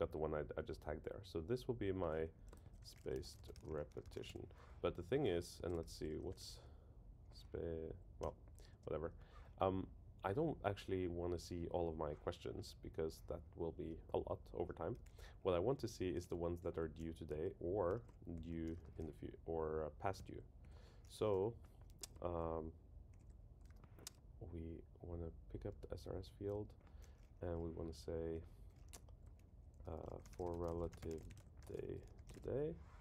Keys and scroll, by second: 2.3 super+Right, 2.6 shift+super+Left, 5.6 super+Left, 7.9 Down, 8.2 Return, 20.2 Return, 20.6 Right, 25.7 Return, 26.4 Right.